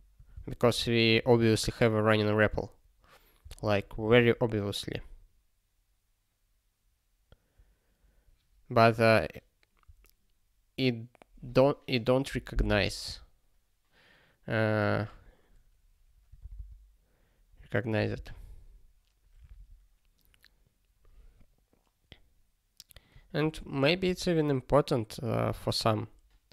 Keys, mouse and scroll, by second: 0.5 ctrl+s, 1.2 ctrl+k, 9.8 click, 16.4 super+b, 18.0 super+b, 18.1 super+b, 24.0 super+b.